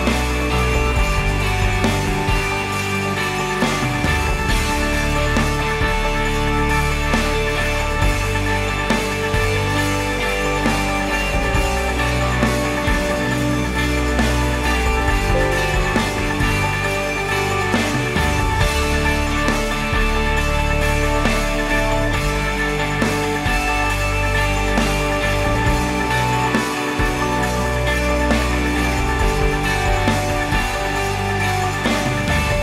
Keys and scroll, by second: 0.7 shift+d, 2.2 i, 3.8 r, 6.4-7.4 typing, 7.6 Return, 10.9 ctrl+s.